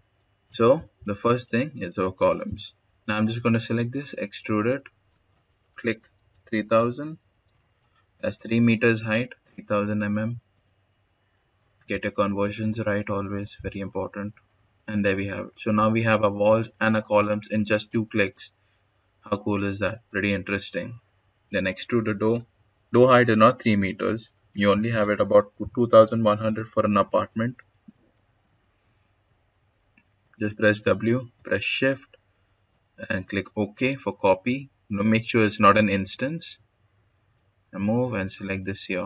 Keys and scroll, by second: 5.5-7.8 typing, 8.2 Return, 24.3-26.3 typing, 27.5-29.9 typing, 35.4 s.